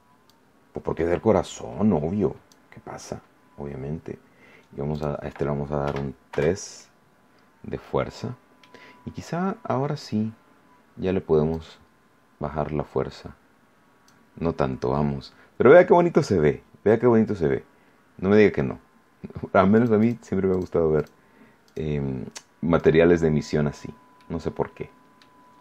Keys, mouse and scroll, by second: 0.2-2.7 drag, 4.9 click, 5.8 3, 6.3 Return, 7.3 scroll down 2, 7.7-8.7 middle drag, 11.5-14.2 drag, 15.5 scroll up 1, 19.7 click, 20.5 click, 20.9 click, 21.6 click, 22.7 click, 23.7 scroll down 2, 24.1-25.3 middle drag, 25.5 scroll up 2.